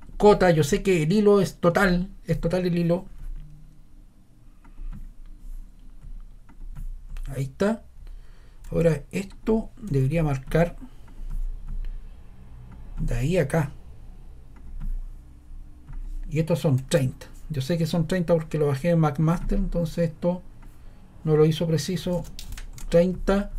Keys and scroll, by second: 8.6 shift+⟲, 9.8 BackSpace, 21.7-22.6 typing, 22.7 Return.